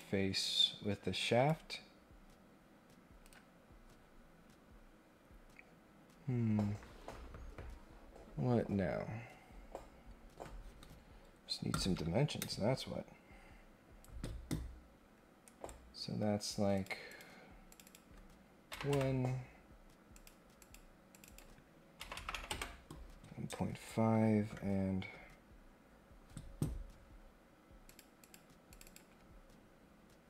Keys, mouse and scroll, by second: 2.0 scroll down 4, 2.5 scroll up 2, 3.2 Escape, 15.4 right click, 16.7 click, 17.0 click, 17.6 click, 20.1 click, 20.6 click, 21.1 click, 21.2 click, 27.8 click, 28.2 click, 28.6 click.